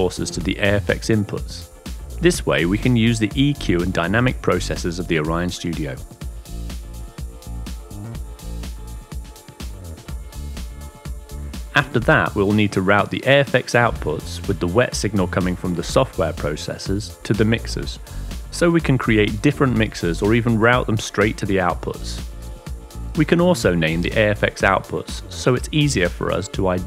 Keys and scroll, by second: 23.8-26.8 typing.